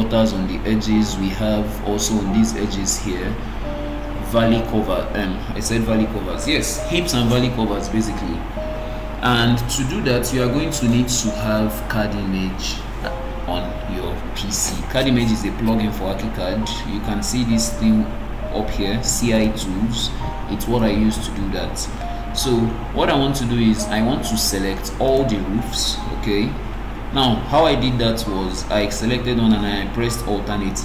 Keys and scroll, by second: 26.5 alt+g.